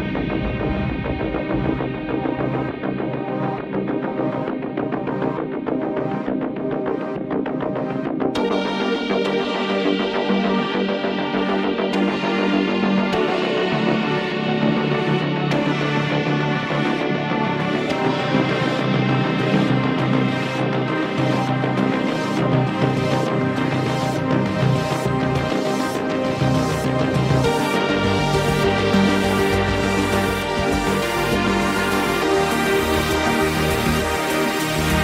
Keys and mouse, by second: 1.3 ctrl+z, 1.6 ctrl+z, 1.8 right click, 2.1 ctrl+z, 3.0 ctrl+z, 4.1 ctrl+z, 4.5 ctrl+z, 4.8 ctrl+z, 5.4 ctrl+z, 7.2 right click, 11.8 ctrl+z, 12.4 ctrl+z, 12.7 ctrl+z, 13.2 ctrl+z, 14.5 ctrl+z, 14.6 ctrl+z, 14.7 right click, 15.5 ctrl+z, 16.2 ctrl+z, 19.4 ctrl+z, 20.6 ctrl+z, 20.8 ctrl+z, 21.1 ctrl+z, 21.7 ctrl+z, 22.2 ctrl+z, 22.8 ctrl+z, 23.4 right click, 23.6 ctrl+z, 24.6 ctrl+z, 30.3 ctrl+z, 30.3 right click, 30.6 ctrl+z, 31.4 ctrl+z, 31.6 ctrl+z, 31.8 ctrl+z, 32.3 ctrl+z, 33.4 ctrl+z, 33.5 ctrl+z.